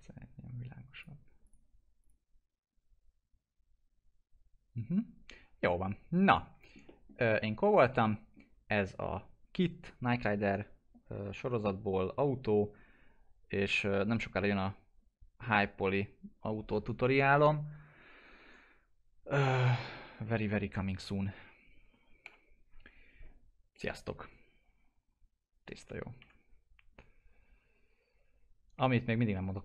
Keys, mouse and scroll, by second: 6.2 click, 6.3 alt+middle click, 7.2 alt+middle click, 8.0 middle click, 22.2 middle click, 23.7 click, 26.1 F4.